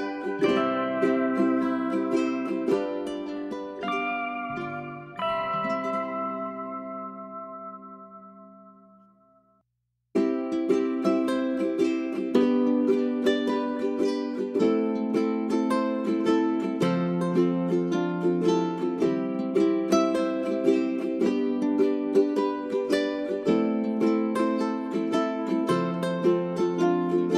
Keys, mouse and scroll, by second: 5.1 space, 5.3-7.1 drag, 7.5 right click, 8.9 click, 13.1 click, 13.8 click, 16.1 g, 16.3-27.3 drag.